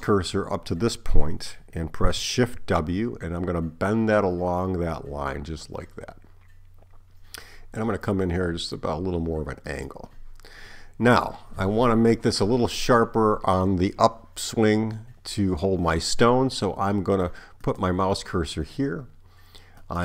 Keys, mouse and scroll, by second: 2.6 shift+w, 17.7 click, 19.8 right click.